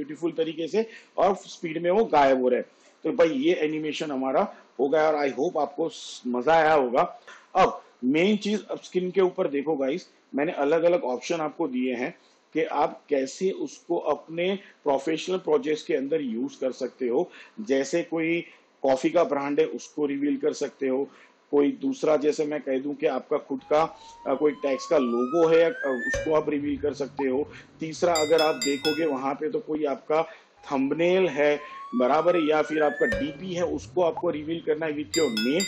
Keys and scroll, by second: 3.0 space.